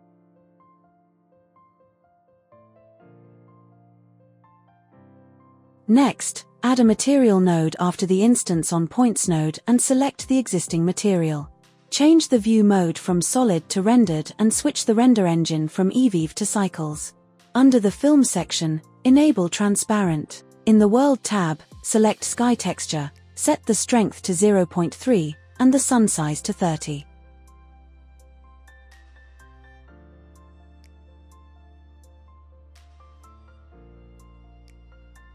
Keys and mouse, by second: 0.7 l, 1.4 s, 1.9 shift+z, 2.7 Tab, 5.6 drag, 6.4 shift+a, 9.3-11.2 drag, 11.9 click, 13.0-14.0 drag, 15.6-17.1 drag, 17.1-17.5 middle drag, 17.5-18.0 drag, 18.0-19.1 middle drag, 19.1 click, 19.2-20.7 middle drag, 20.7 click, 20.8-22.0 middle drag, 22.0 drag, 22.1-22.7 middle drag, 22.7-23.9 drag, 25.8-34.1 drag.